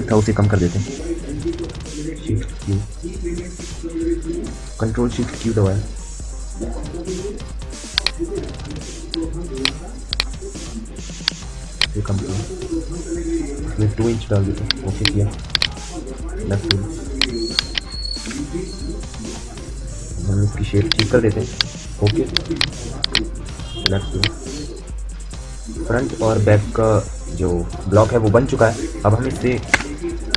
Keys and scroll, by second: 1.9 shift+q, 4.8 ctrl+shift+q, 13.6 2, 18.0 Delete, 20.2 q, 29.4 space.